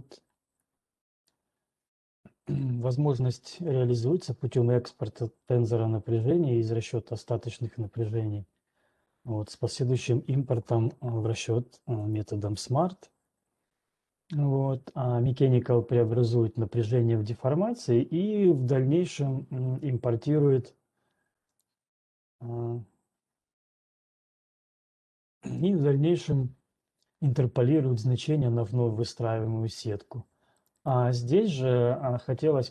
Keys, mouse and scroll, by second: 1.3-1.7 scroll, 5.3 scroll, 6.1 middle click, 12.3-17.3 drag, 22.3-23.3 drag, 24.9 ctrl+1, 24.9 click, 25.8 click, 31.1 right click.